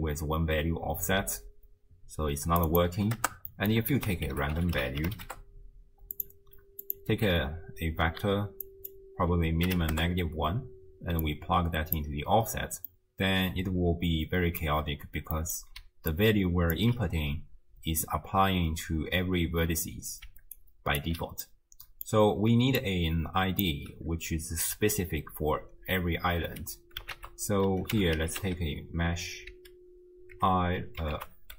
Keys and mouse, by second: 2.7 click, 3.5 middle click, 4.0 ctrl+a, 6.8 click, 8.7-10.0 drag, 11.2-12.0 drag, 12.9-14.6 middle drag, 15.4 middle click, 15.8 d, 16.1 click, 16.8 d, 16.8 d, 20.3 d, 20.6 click, 21.0 d, 21.1 d, 21.5 click, 22.5 d, 22.8-23.8 drag, 23.6 d, 23.8 d, 24.4 d, 27.2 ctrl+a.